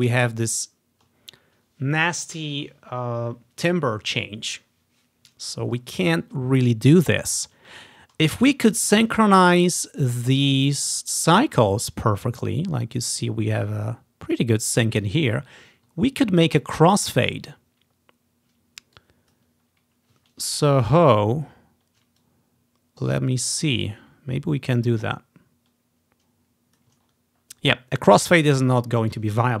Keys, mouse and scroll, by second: 5.7-6.9 ctrl+scroll up 1, 6.9-7.5 ctrl+scroll down 1, 8.0 scroll down 2, 8.5 click, 9.3-10.7 ctrl+scroll up 2, 9.8-13.2 ctrl+drag, 13.6 click, 15.1 ctrl+scroll down 1, 16.1 scroll up 1, 16.6 click, 17.0 scroll down 1, 17.1-18.9 ctrl+drag, 19.1-21.2 drag, 20.3 scroll down 1, 21.2 scroll down 1, 21.3-21.6 scroll up 2, 21.9-22.3 scroll down 1, 22.3-23.5 drag, 23.6 ctrl+scroll down 1, 24.0 ctrl+scroll up 1, 24.1 ctrl+click, 25.5-27.5 drag, 27.7 scroll down 1, 28.3-29.2 scroll down 2, 29.2-29.6 drag.